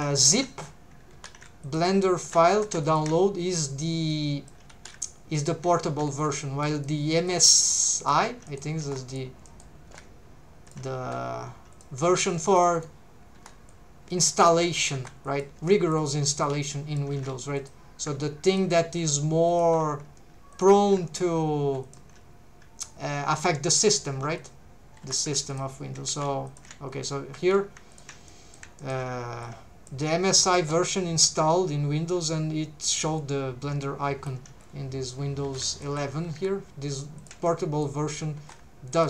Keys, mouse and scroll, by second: 0.2 alt+shift+click, 1.6 alt+shift+click, 2.2 alt+a, 2.8 alt+shift+click, 2.8 3, 4.1 click, 4.7 alt+a, 5.4 alt+shift+click, 5.9 alt+a, 6.1 c, 7.3 right click, 7.3 click, 7.5-8.8 typing, 8.5 middle click, 9.1 click, 9.5 middle click, 9.9 g, 10.7 shift+click, 11.0 r, 11.7 click, 12.2 c, 12.7 right click, 13.4 3, 13.7 click, 14.5 alt+a, 14.9 1, 15.3 click, 15.6 c, 16.0 right click, 16.4 click, 17.2 alt+a, 17.6 click, 18.0 g, 18.5 shift+click, 18.9 r, 19.5 click, 20.5 click, 20.9 g, 21.8 shift+right click, 21.8 shift+click, 24.4 right click, 24.4 click, 25.0 3, 25.5 alt+shift+right click, 25.5 alt+shift+click, 26.3 alt+a, 26.5 alt+shift+right click, 26.5 alt+shift+click, 27.6 alt+a, 27.9 alt+shift+click, 28.3 middle click, 28.8 shift+middle click, 29.4 click, 34.1-34.6 scroll up 2, 34.6 scroll down 1, 35.4 alt+a, 35.7 alt+shift+click, 36.3 s, 37.2 shift+click, 37.5 middle click, 38.4 1, 38.9 click.